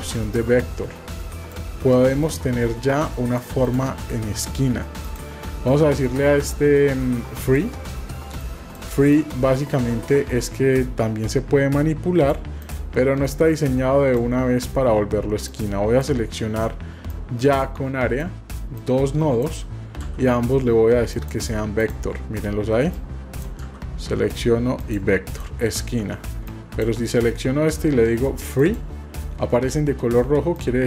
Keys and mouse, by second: 0.4-1.5 drag, 2.2-3.5 drag, 3.6 click, 5.0 click, 5.5 v, 8.4 click, 9.1-12.3 drag, 12.6 click, 13.3 click, 15.5 click, 17.1-18.3 drag, 18.7 click, 23.1 click, 23.6 v, 26.6 click, 30.5 click.